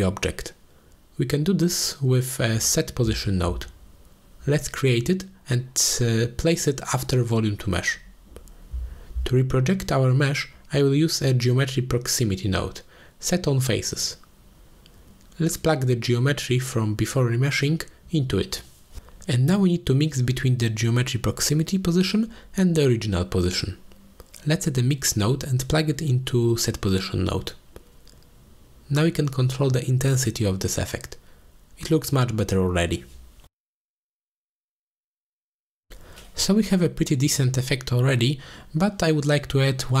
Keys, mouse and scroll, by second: 0.3 ctrl+space, 1.5 click, 1.7 shift+a, 6.7 middle click, 7.6-11.3 drag, 13.6-16.2 drag, 17.2 middle click, 17.7-18.1 drag, 18.7-19.5 drag, 20.7-23.8 drag, 24.5 middle click, 25.5-28.4 drag, 29.4 click, 29.9 click, 30.4-34.2 drag, 37.8 click, 38.4-38.7 middle drag, 39.2-39.5 shift+middle drag, 39.7 drag, 39.9-40.0 middle drag.